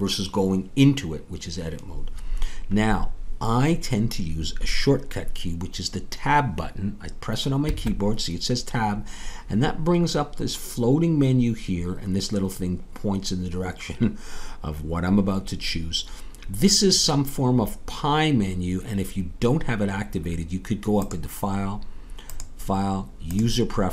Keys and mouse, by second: 7.6 Tab, 22.3-23.9 drag.